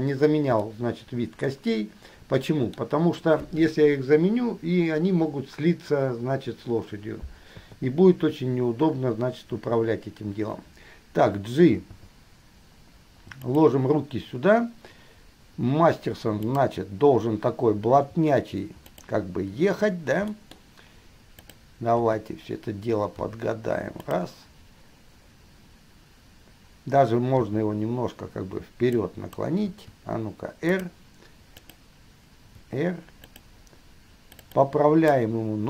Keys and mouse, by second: 0.9-5.5 middle drag, 7.8 KP_3, 12.1 g, 16.6 click, 18.3 r, 20.5-21.1 middle drag, 21.6 click, 22.1 KP_3, 23.4 r, 27.6 r, 29.9 r, 31.8 click, 32.8 r, 34.6-35.4 drag.